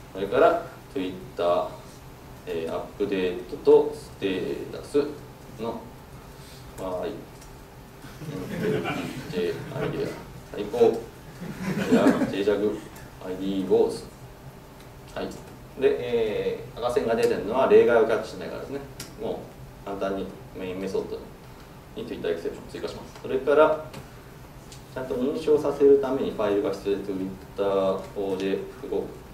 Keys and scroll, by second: 5.0 Tab, 17.3 alt+Return.